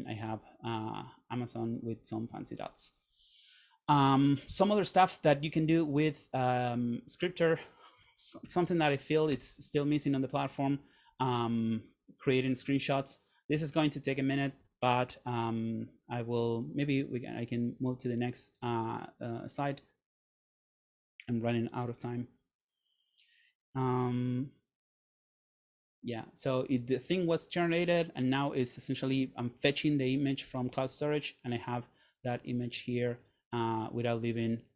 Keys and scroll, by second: 8.5 super+/, 9.5 Return.